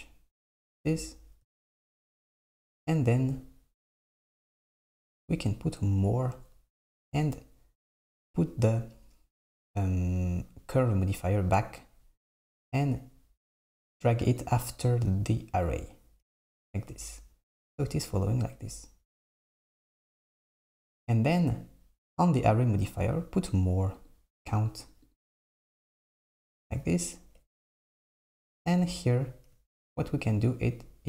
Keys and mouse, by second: 1.6 Tab, 2.3 Tab, 4.0 click, 11.1 click, 14.4-15.7 drag, 24.1-27.7 drag.